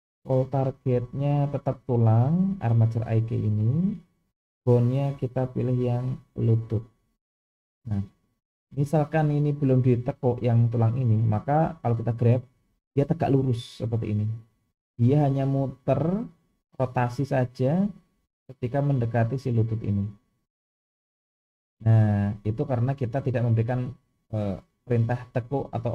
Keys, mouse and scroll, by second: 0.8 click, 4.6-6.7 drag, 8.6 click, 11.7 g.